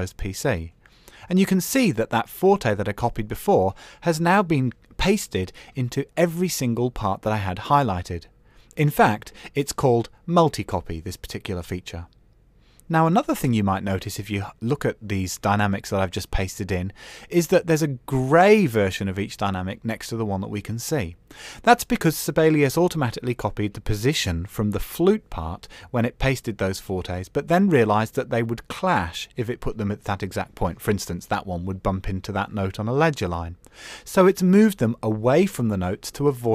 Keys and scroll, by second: 6.7 super+=, 7.8 Escape.